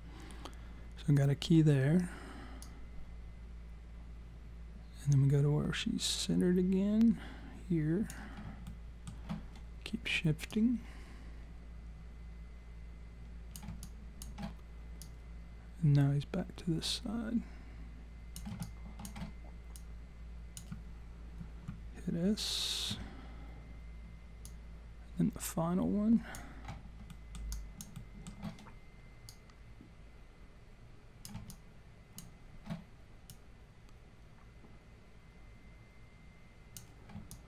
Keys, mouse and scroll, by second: 2.6 click, 8.6 alt+middle click, 10.5 click, 13.8 alt+click, 15.0 click, 18.6 alt+click, 19.8 click, 22.9 s, 24.5 click, 27.1 alt+middle click, 27.5 alt+click, 28.0 alt+middle click, 29.3 click, 31.5 alt+click, 33.3 click, 37.3 alt+click.